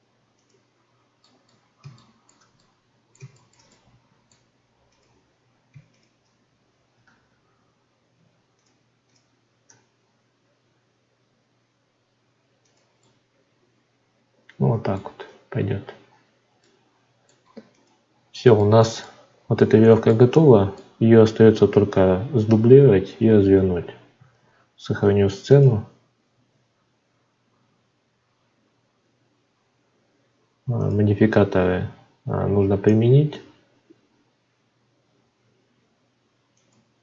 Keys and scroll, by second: 15.2 Tab, 24.3 ctrl+s.